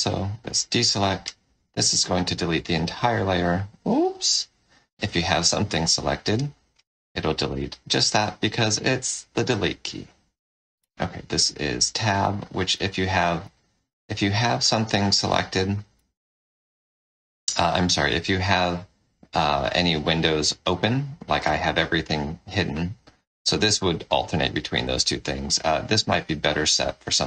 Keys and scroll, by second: 0.4 ctrl+d, 1.6 Delete, 3.7 ctrl+z, 5.6 ctrl+alt+f, 7.5 Delete, 10.7 Tab, 14.8 ctrl+d, 15.9 Tab, 23.6 Tab.